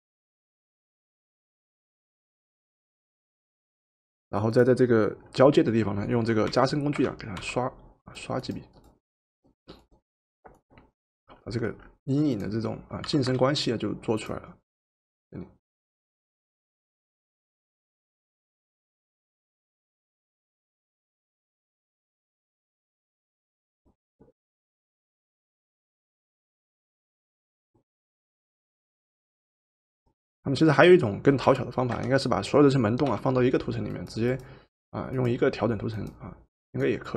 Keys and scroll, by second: 6.4 o, 7.3 o, 13.1 v, 31.9 o, 33.1 o.